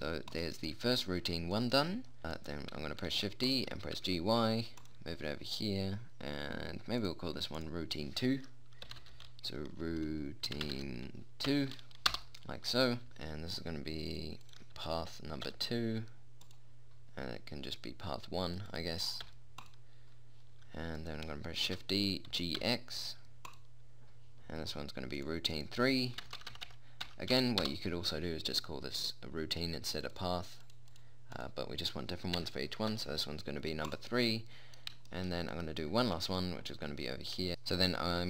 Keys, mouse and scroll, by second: 0.8 right click, 1.5 middle click, 3.7 shift+d, 4.3 g, 7.5-12.6 drag, 13.1 click, 14.6 click, 18.9 click, 21.5 right click, 22.1 shift+d, 25.7-26.9 drag, 26.9 BackSpace, 30.5-31.7 drag.